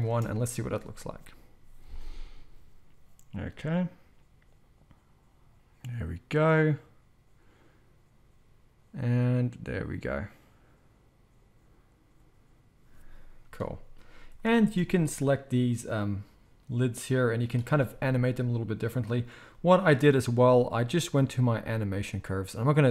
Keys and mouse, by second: 0.0 space, 14.6 space, 15.7-21.1 middle drag, 16.3-19.3 drag, 16.3-19.3 right drag, 21.1-22.9 right drag.